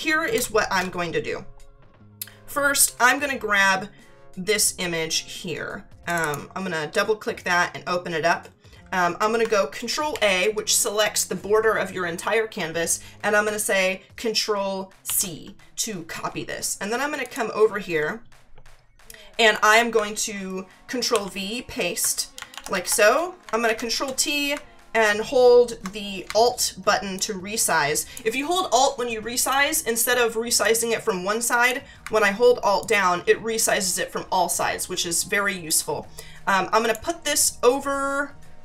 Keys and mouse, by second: 0.3 space, 6.1 click, 10.1 ctrl+a, 15.0 ctrl+c, 17.2 click, 21.1 ctrl+v, 23.6 ctrl+t, 27.2 alt+click, 30.6 click, 32.8 alt+click, 36.2 click.